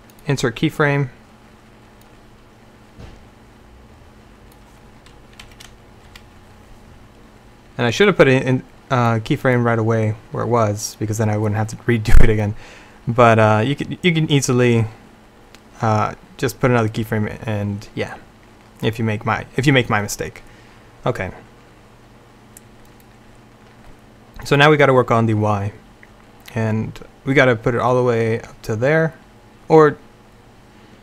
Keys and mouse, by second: 3.7-5.5 drag, 5.5 Left, 6.2 Right, 13.7-14.7 drag, 24.9-28.3 drag.